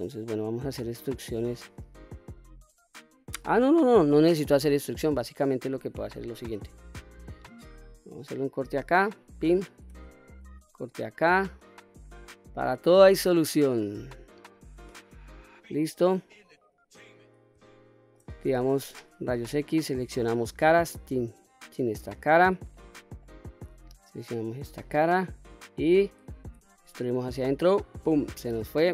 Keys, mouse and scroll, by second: 0.0-0.4 middle drag, 0.9 middle click, 2.1-3.6 middle drag, 4.1 middle click, 5.8 ctrl+r, 8.9 click, 10.1 ctrl+r, 12.2 click, 12.7-16.0 middle drag, 16.4-17.1 scroll up 2, 17.4-17.9 shift+middle drag, 18.3 q, 18.8-19.5 scroll up 1, 20.2 3, 20.8 click, 22.5 shift+middle click, 23.8 shift+click, 24.6-25.6 middle drag, 26.3 e, 27.6 click, 28.1-28.7 scroll down 2, 28.8 q.